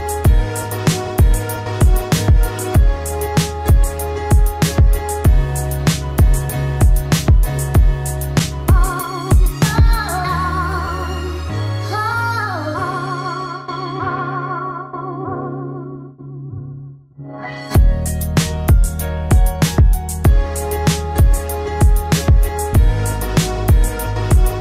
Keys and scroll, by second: 16.7 ctrl+t.